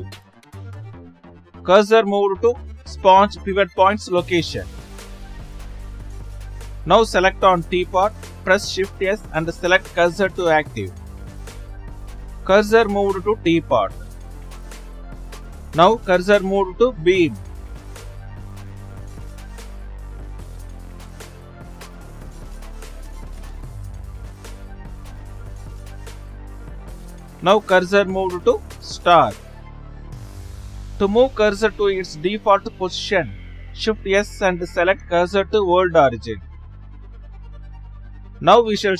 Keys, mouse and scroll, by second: 3.3 shift+z, 4.0-4.6 middle drag, 4.6 shift+z, 5.6 click, 9.7 shift+s, 12.4 shift+z, 13.8 shift+z, 14.6 Left, 15.9 shift+z, 17.1 shift+z, 17.5 shift+z, 19.7 shift+s, 21.1-22.9 middle drag, 22.9 click, 28.0 shift+s, 29.1-30.0 middle drag, 33.6 shift+s, 36.6 click, 37.2-38.9 middle drag.